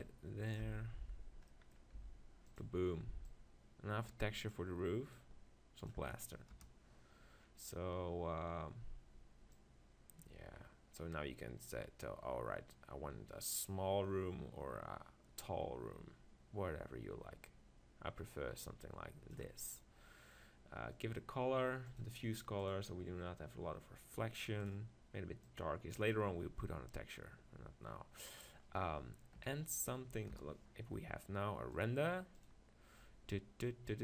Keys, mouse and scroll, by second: 0.0 click, 0.7 z, 2.1 s, 2.6 click, 6.5 KP_0, 6.8 click, 7.4-9.5 middle drag, 9.5 click, 10.2-11.4 right drag, 19.7-22.7 middle drag, 22.7-26.6 drag, 29.4 KP_3, 30.3 KP_0, 31.7-33.5 drag.